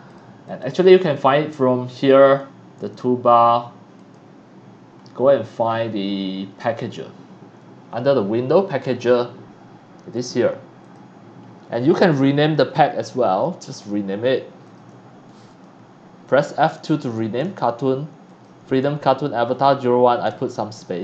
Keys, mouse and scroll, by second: 0.1 click, 0.4 click, 2.2 click, 2.8 click, 4.0 click, 8.8 click, 10.1 click, 10.8 click, 11.7 right click, 13.7 click, 14.6 click, 15.4 click, 16.7 click, 17.4 space, 18.3 click, 18.8 space, 19.5 click, 20.7 click.